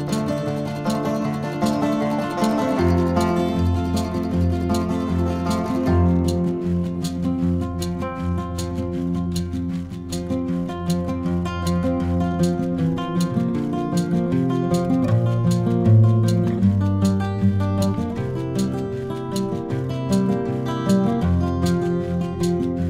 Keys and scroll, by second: 0.2 ctrl+z, 4.2 ctrl+-, 4.7 ctrl+KP_Add, 7.9 ctrl+shift+], 20.0 ctrl+-, 20.8 ctrl+KP_Add.